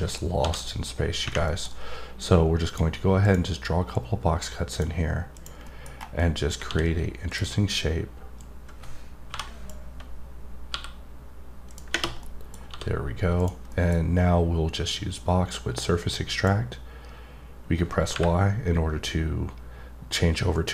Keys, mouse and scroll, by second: 1.4 middle click, 2.2 click, 3.2 click, 3.9 click, 5.3 click, 5.6 middle click, 5.9 scroll up 1, 6.2 middle click, 7.3 click, 8.4 click, 11.7 click, 12.2 middle click, 13.3 click, 13.7 middle click, 15.1 click, 20.5 click.